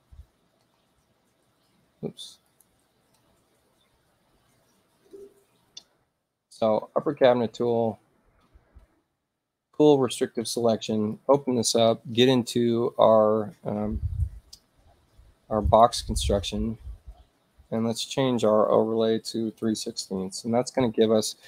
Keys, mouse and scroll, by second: 2.5 click, 8.1-9.4 shift+drag, 11.1 click, 15.7 click, 17.8 click, 19.4-20.6 typing.